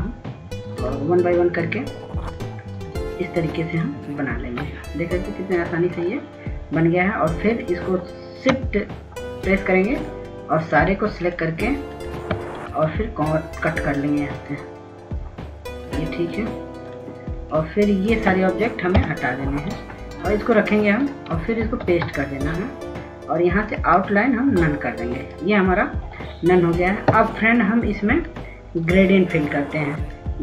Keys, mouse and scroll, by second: 2.1 click, 11.4 shift+click, 15.1 click, 20.4 Delete, 21.7 click, 23.2 ctrl+v, 25.4 right click, 26.8-30.4 drag.